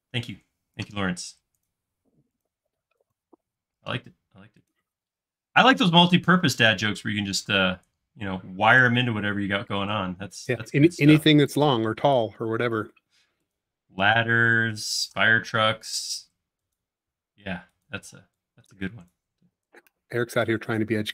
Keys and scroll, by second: 11.7 space, 12.4 a, 18.1 e, 19.5 space.